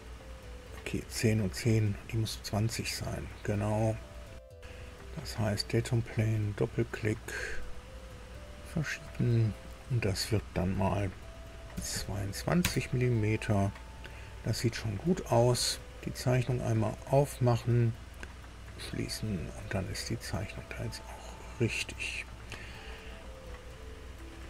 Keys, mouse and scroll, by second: 5.9 click, 7.5-8.6 drag, 9.6 click, 11.7 KP_2, 11.9 KP_2, 12.5 KP_Enter, 16.3 click, 18.7 click, 19.5-23.6 middle drag.